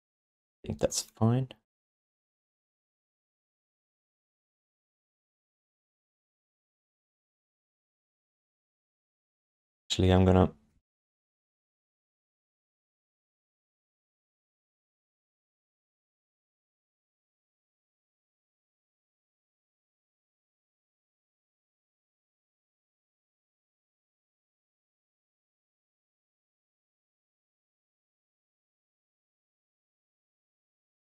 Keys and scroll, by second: 5.5 q, 6.3 alt+shift+d, 9.0 BackSpace, 26.2 r.